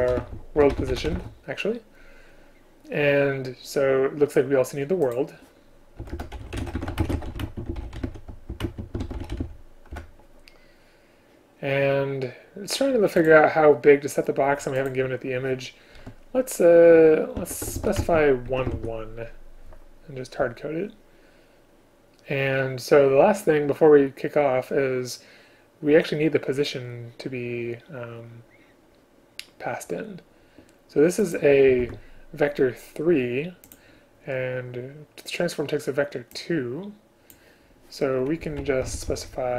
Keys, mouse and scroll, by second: 6.2 Return, 7.1 space, 8.7 shift+space, 10.0 Return, 14.9 shift+click, 18.0 space, 31.9 ctrl+q, 38.5 Left, 38.6 Right.